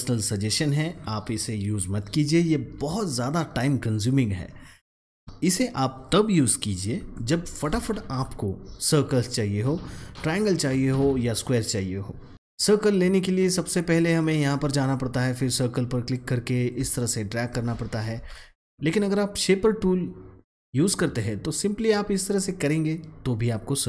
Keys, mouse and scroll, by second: 5.2-6.7 drag, 7.1 click, 7.7 ctrl+x, 9.1 click, 14.1-18.1 drag, 18.1 ctrl+z, 18.5-21.4 drag, 21.4-23.8 drag.